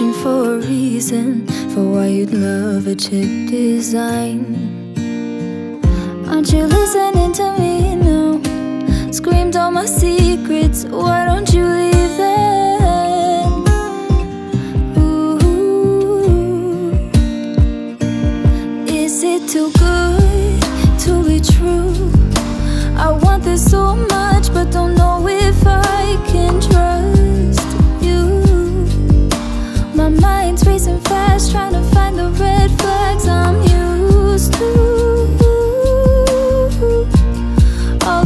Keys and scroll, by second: 23.8 ctrl+-, 24.3 ctrl+-, 33.2 ctrl+t.